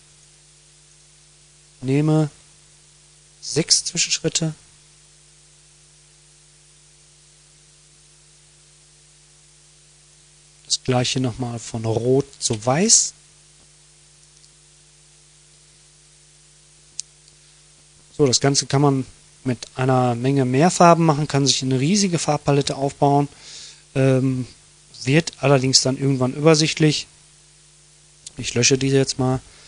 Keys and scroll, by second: 26.6 Delete.